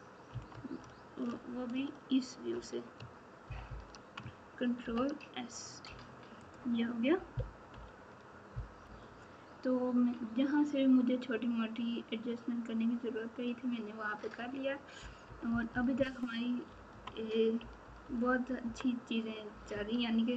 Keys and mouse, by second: 0.3 KP_3, 4.8 ctrl+s, 6.5 click, 15.2 KP_4, 15.9-19.9 KP_4, 16.6 KP_Subtract.